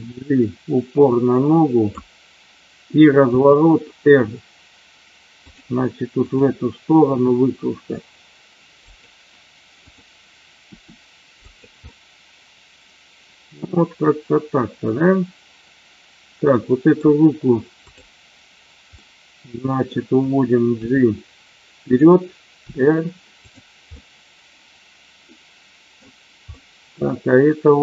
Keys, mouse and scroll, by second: 3.2 r, 6.1 click, 7.0 r, 8.9 click, 9.8 click, 10.6 r, 11.4 click, 11.8-16.9 middle drag, 17.8 click, 19.0 middle click, 21.8 click, 23.4 click, 23.9-25.9 middle drag, 26.5-27.8 middle drag.